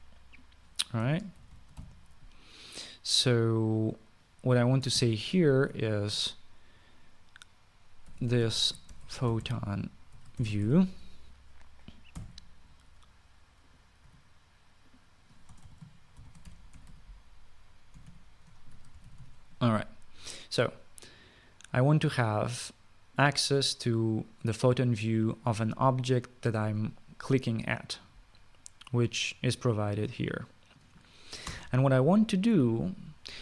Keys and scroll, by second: 1.9-2.6 typing, 5.6 space, 5.7 Left, 8.6-11.9 typing, 14.5 typing, 16.2-20.4 typing, 16.4 Left, 32.2 Return.